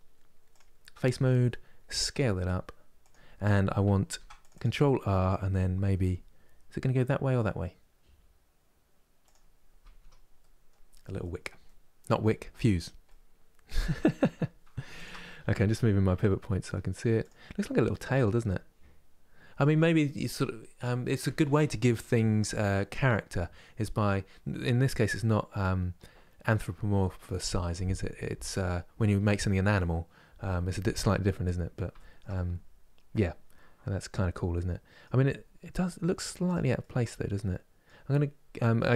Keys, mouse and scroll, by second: 0.2 click, 0.7-1.8 middle drag, 1.8 s, 3.8 ctrl+r, 4.5-5.7 middle drag, 5.7 g, 9.3 scroll down 2, 9.7 Tab, 10.1 middle click, 10.6 scroll down 3, 11.3 middle click, 12.2 click, 12.8-14.7 middle drag, 14.7 shift+right click, 15.0-16.9 middle drag, 16.9 click, 17.3 middle click, 17.8 click, 18.2-21.2 middle drag, 31.0 scroll up 3, 31.7-35.0 shift+middle drag, 35.0 scroll down 5, 35.4 middle click, 36.2 click, 36.5-38.9 middle drag.